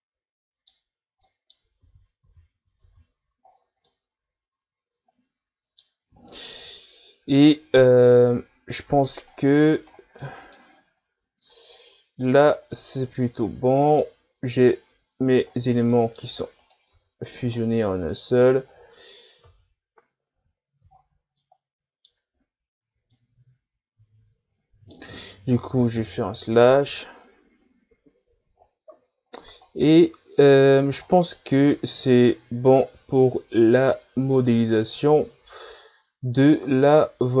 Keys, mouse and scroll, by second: 0.9 scroll up 1, 1.3 middle click, 1.9 ctrl+z, 2.3 ctrl+z, 2.9 Tab, 3.5 scroll down 3, 3.9-6.9 middle drag, 8.4-9.0 scroll down 2, 9.3-9.9 scroll down 3, 9.9 scroll down 5, 10.2-10.8 middle drag, 10.8-11.7 scroll up 3, 11.7 scroll up 1, 11.7-12.7 scroll down 6, 12.7-15.5 middle drag, 15.5-15.9 scroll down 3, 15.9-16.6 middle drag, 16.6 right click, 17.0 Tab, 17.5-18.5 scroll up 5, 18.5-19.5 scroll down 4, 19.5 Tab, 20.3 a, 21.0-21.4 shift+scroll up 7, 21.4-25.9 middle drag, 25.9 KP_Divide, 27.1-27.7 scroll down 4, 29.7-31.4 scroll down 1, 31.4-37.4 middle drag.